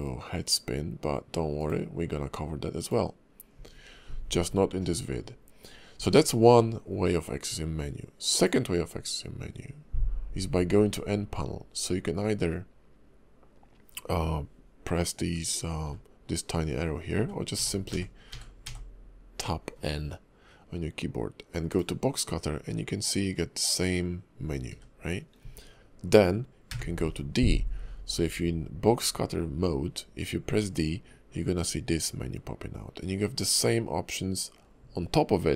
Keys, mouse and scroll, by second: 8.3 click, 15.8 n, 17.1-18.6 typing, 21.7 click, 24.7 n, 26.7 d.